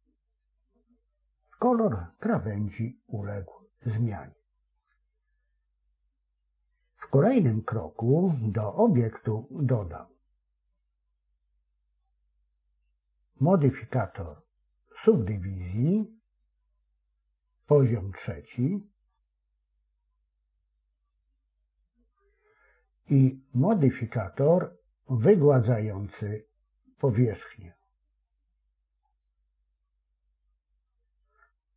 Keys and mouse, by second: 4.9-6.5 middle drag, 8.7 click, 11.9-15.6 drag, 23.6-28.5 drag.